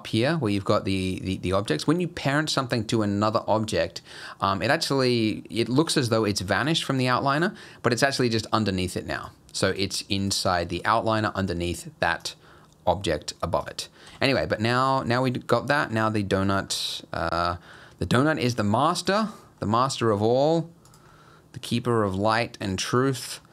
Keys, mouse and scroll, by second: 7.3 click, 8.0 click, 9.2 click, 9.7 click, 10.2 click, 10.8 click, 11.2 click, 12.2 click, 13.6 click, 14.1 g, 15.1 middle click, 15.9 g, 16.8 middle click, 18.2 middle click, 18.5 scroll down 3, 18.9 middle click, 19.3 scroll down 2, 19.6 middle click, 20.4 g, 21.1 middle click, 21.8 g, 23.0 middle click, 23.3-23.5 scroll up 4.